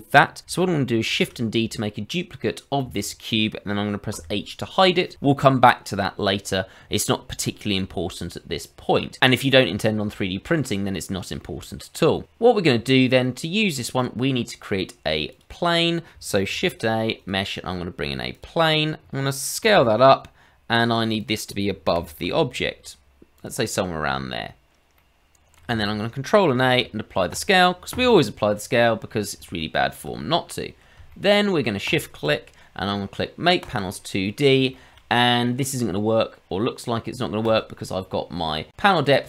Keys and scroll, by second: 1.0 shift+d, 4.1 h, 16.5 shift+a, 18.4 shift+a, 19.6 s, 21.9 g, 26.6 ctrl+a.